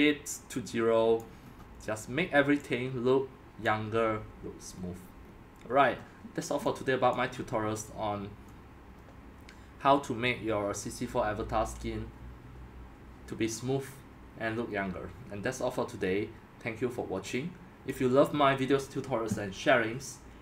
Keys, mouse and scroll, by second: 1.4-3.7 middle drag, 1.4 scroll, 3.7-4.7 drag, 4.7-5.7 middle drag, 4.7-5.8 scroll, 5.7-6.3 scroll up 1, 6.3-7.2 scroll up 1, 7.2 click, 7.4 scroll, 10.0-12.4 middle drag, 17.9-18.3 drag, 18.3-20.4 middle drag, 18.3-18.8 scroll.